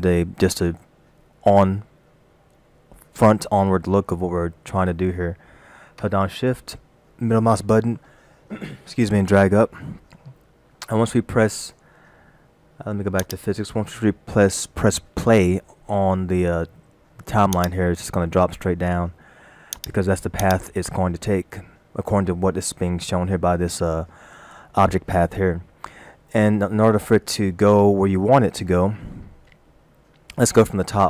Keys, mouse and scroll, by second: 9.2 shift+middle click, 13.3 click, 17.6 click, 19.8 click, 20.5 click.